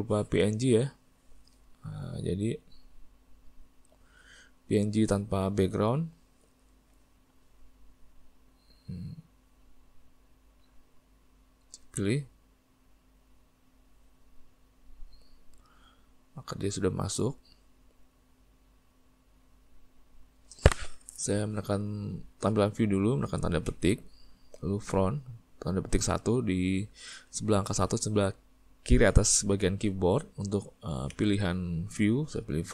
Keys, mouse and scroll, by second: 1.0 click, 15.3 click, 17.3 click, 18.4-19.9 middle drag, 19.9 click.